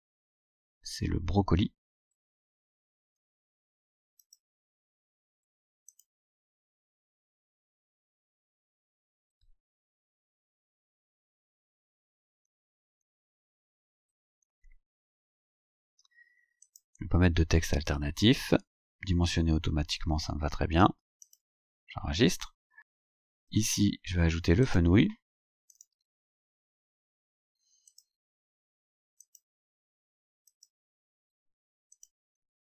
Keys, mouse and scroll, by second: 4.3 click, 6.0 click, 16.7 click, 20.4-21.3 scroll down 1, 21.3 click, 23.4 click, 24.7 click, 25.8 click, 27.9 click, 29.3 click, 30.5 click, 32.0 click.